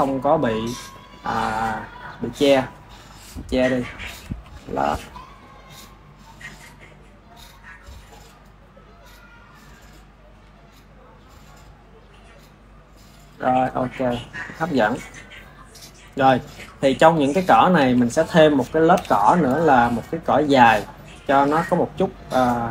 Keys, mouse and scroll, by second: 0.5 click, 1.9 click, 4.0 click, 4.3 r, 8.1 click, 10.4 click, 11.5 click, 12.3 click, 13.3 click, 13.7-14.6 ctrl+middle drag, 14.6 ctrl+s, 14.8 ctrl+s, 15.1-17.8 ctrl+middle drag, 17.8 KP_1, 18.9 KP_1, 19.6-22.7 ctrl+middle drag.